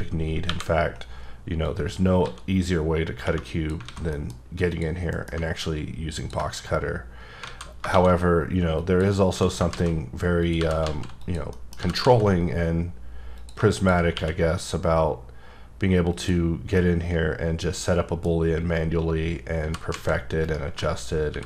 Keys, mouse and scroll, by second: 0.4 KP_1, 1.6 click, 2.2 x, 3.8 alt+a, 4.1 middle click, 4.7 click, 5.1 m, 6.2 ctrl+click, 6.5 scroll up 1, 7.2 scroll down 1, 7.4 alt+a, 8.7 click, 9.3-12.0 typing, 10.4 click, 11.2 click, 11.5 middle click, 13.3 click, 13.8 click, 14.1 q, 16.1 click, 16.7 middle click, 18.5-19.6 scroll up 1, 19.6 g, 20.1 z, 20.4 right click, 21.0 scroll down 2, 21.3 ctrl+r.